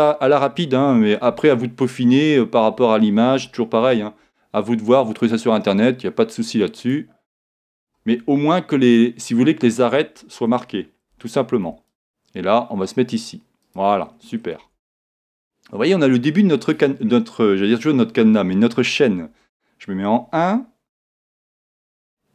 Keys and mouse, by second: 0.1-3.8 middle drag, 3.8 ctrl+r, 6.9 click, 8.0 ctrl+r, 8.5 click, 9.0 click, 10.6 Escape, 13.7-15.3 drag, 14.6 Tab, 15.5-17.8 middle drag, 19.3 KP_1, 21.0-22.3 middle drag.